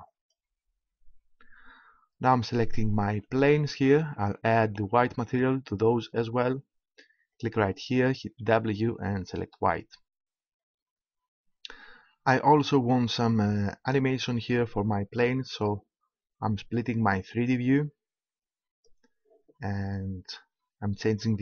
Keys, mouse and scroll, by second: 3.2-5.1 right drag, 6.9 click, 7.3-9.1 drag, 10.6-14.5 middle drag, 14.5-15.5 scroll up 1, 15.5-17.5 middle drag, 17.5 click.